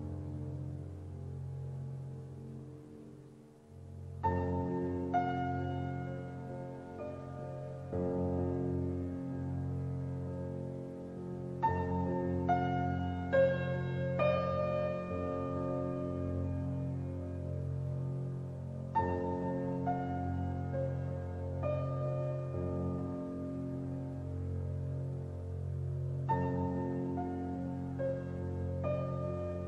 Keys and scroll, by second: 10.6 Up.